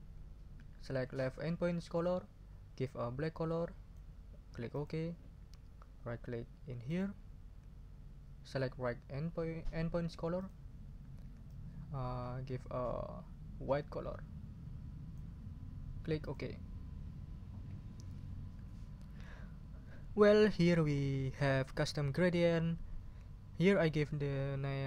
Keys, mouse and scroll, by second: 1.9 click, 2.8-4.1 drag, 4.7 click, 6.9 right click, 10.4 click, 11.5-15.3 drag, 16.2 click.